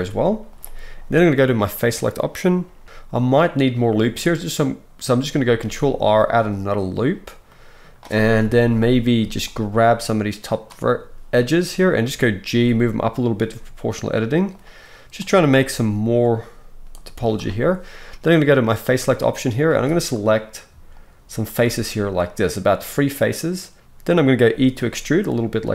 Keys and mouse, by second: 1.9-6.5 middle drag, 5.6 ctrl+r, 5.8 click, 5.8-7.4 right drag, 7.4-9.8 drag, 8.4 KP_1, 9.2 z, 9.8-14.6 middle drag, 12.5 g, 14.6 click, 15.2 middle click, 15.4-17.4 drag, 15.7 g, 17.1 z, 17.4-18.5 right drag, 18.5-20.2 middle drag, 19.7 alt+a, 20.2 right click, 20.9 shift+middle click, 21.0-25.7 shift+right drag, 23.7 ctrl+z, 24.7 e.